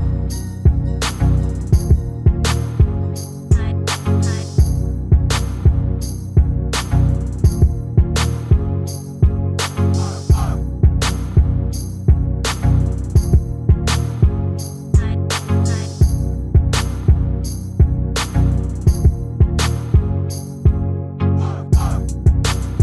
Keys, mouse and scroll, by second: 3.4-5.4 middle drag, 5.5-7.2 drag, 6.1-7.5 middle drag, 8.9-10.3 right drag, 10.3-11.8 middle drag, 12.6 scroll down 1, 13.0 KP_7, 13.5 middle click, 15.3 e, 15.9-17.2 middle drag, 18.1-22.8 middle drag, 22.0 s.